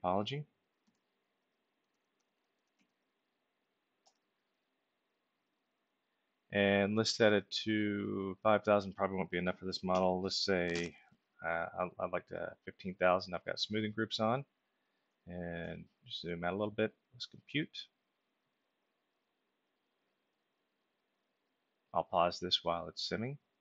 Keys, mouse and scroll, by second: 0.8-3.2 typing, 4.0 Return, 8.0 click, 9.9 1, 10.7 Return, 15.3-16.3 ctrl+alt+middle drag, 17.7 click.